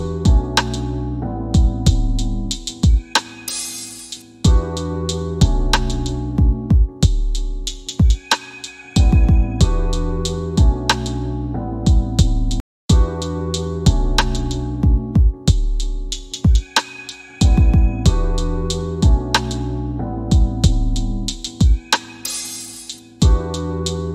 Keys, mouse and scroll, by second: 4.3 scroll up 1, 10.1 8, 11.6 click, 16.0 click.